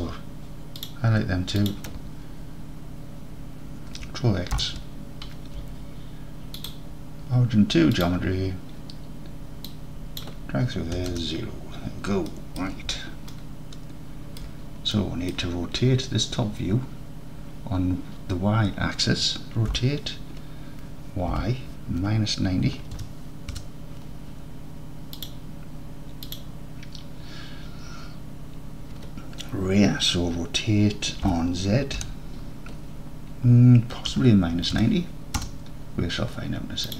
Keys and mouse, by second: 0.8 click, 1.7 shift+click, 4.6 ctrl+x, 5.7 Tab, 6.6-8.1 drag, 9.8-11.8 drag, 12.3 middle drag, 13.3-14.0 alt+middle drag, 15.1 drag, 19.8 r, 21.4 y, 22.1 KP_Subtract, 22.7 KP_9, 23.0 KP_0, 23.6 KP_Enter, 26.3 click, 31.3 r, 32.1 z, 34.1 KP_Subtract, 34.6 KP_9, 35.1 KP_0, 35.4 KP_Enter.